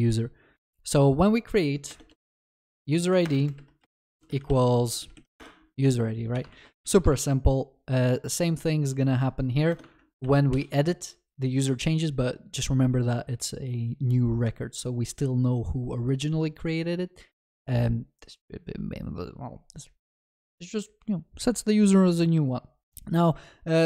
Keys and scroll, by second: 3.3 Return, 7.1 ctrl+c.